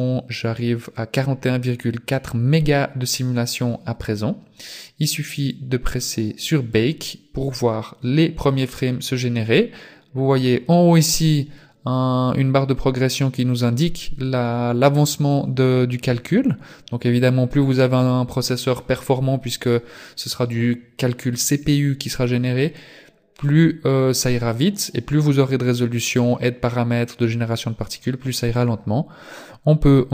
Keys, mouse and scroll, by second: 30.0 click.